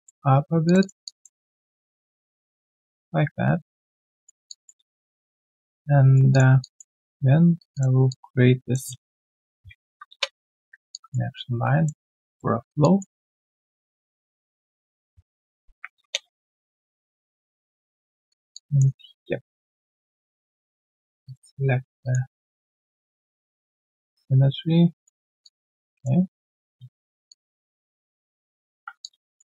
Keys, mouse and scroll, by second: 0.8 shift+double click, 1.0 alt+double click, 4.4 alt+click, 4.8 alt+q, 4.8 click, 5.0 right click, 5.8 right click, 6.6 alt+click, 7.5 shift+click, 8.0 alt+click, 9.5 ctrl+alt+q, 10.9 alt+click, 12.8 alt+click, 13.2 Tab, 15.6 ctrl+alt+q, 16.0 ctrl+Return, 16.5 Return, 16.8 alt+click, 17.1 alt+click, 17.3 right click, 18.5 alt+click, 25.4 alt+click, 27.2 ctrl+shift+click, 29.0 alt+click.